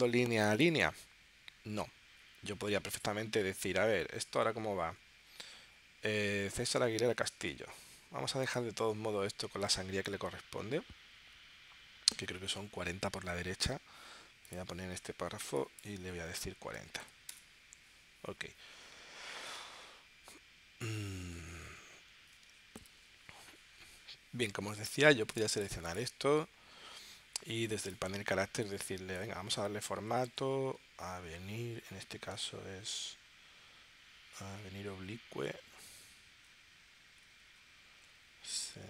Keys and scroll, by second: 16.8 4, 29.7-30.8 typing.